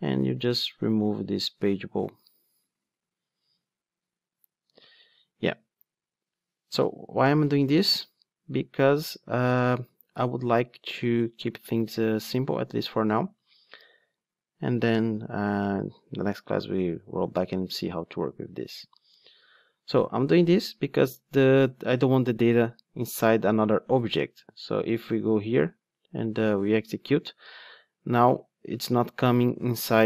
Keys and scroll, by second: 2.1 super+x, 12.8 ctrl+r.